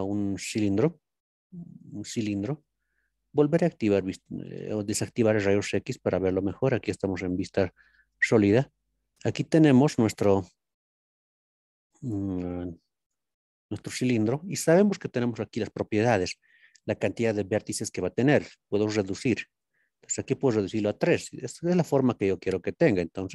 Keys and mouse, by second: 0.0 shift+a, 2.6-3.4 middle drag, 5.5-8.0 drag, 8.0-10.4 middle drag, 19.4 click.